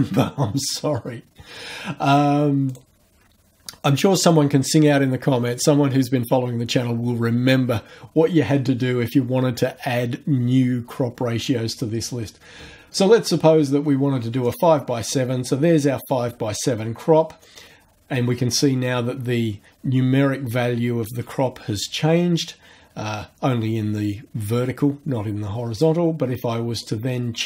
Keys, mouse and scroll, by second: 2.7 click, 14.5 click, 17.4-26.0 drag, 26.8-27.4 drag.